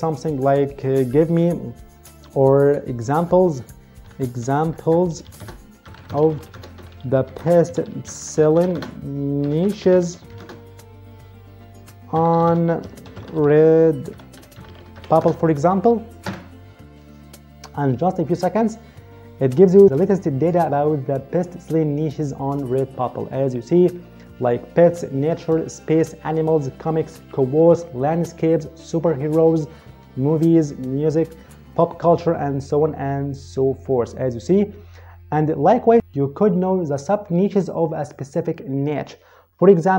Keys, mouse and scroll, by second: 0.4 click, 3.0-10.7 typing, 11.8-15.5 typing, 13.0 Caps_Lock, 16.1 Return.